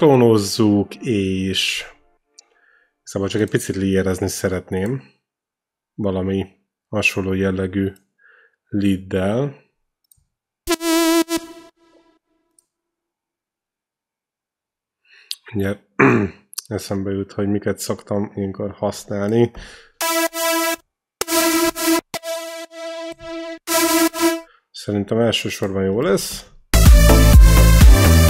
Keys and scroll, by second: 10.4 e, 19.9 e, 26.0 ctrl+c, 26.3 ctrl+v, 26.5 space.